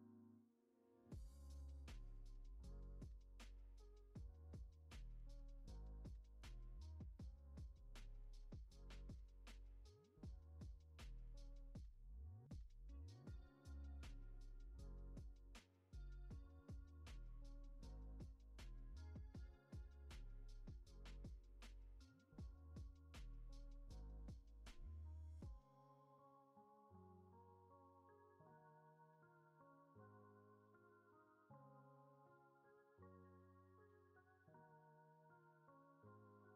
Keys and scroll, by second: 9.0 F9, 13.6 ctrl+s, 18.3 ctrl+s.